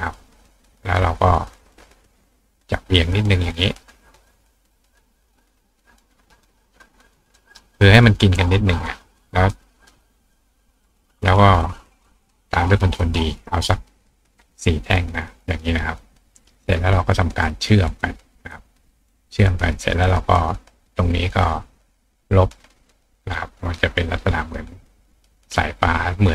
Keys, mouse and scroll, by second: 0.9 click, 1.8 click, 2.2 right click, 2.6-7.5 drag, 7.4-10.8 right drag, 15.0 click, 15.5 click, 17.7 click, 18.5 click, 19.1 click, 19.7 click, 21.5 click, 22.6 click, 22.8 click, 24.9-26.1 drag, 26.2 click.